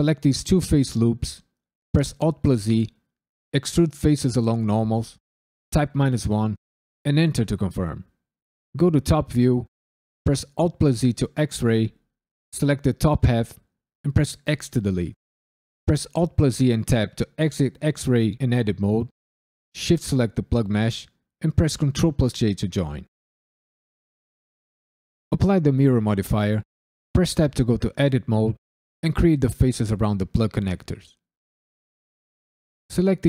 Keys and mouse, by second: 0.3 alt+shift+click, 1.9 alt+e, 5.7 KP_Subtract, 6.0 KP_1, 7.0 KP_Enter, 8.7 KP_7, 10.2 alt+z, 10.8 1, 11.5 drag, 14.4 x, 15.8 alt+z, 16.8 Tab, 19.6 shift+click, 21.8 ctrl+j, 24.5-25.3 drag, 26.0 ctrl+middle click, 27.3 Tab, 27.9 click, 28.2 shift+click, 28.5 shift+click, 29.1 f, 29.2 click, 29.6-32.2 f, 32.6 3, 32.9 alt+click.